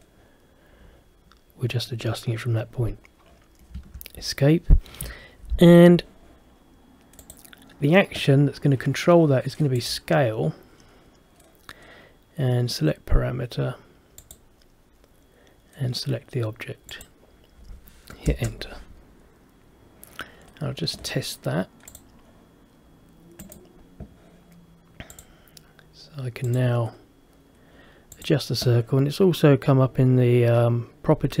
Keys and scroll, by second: 3.9 Escape, 18.4 Return.